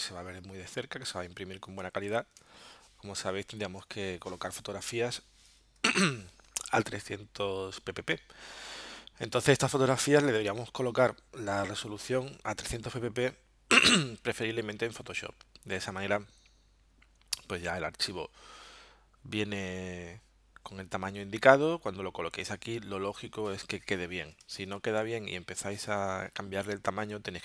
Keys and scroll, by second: 1.8 z, 2.4 space, 5.8 v, 24.4 space.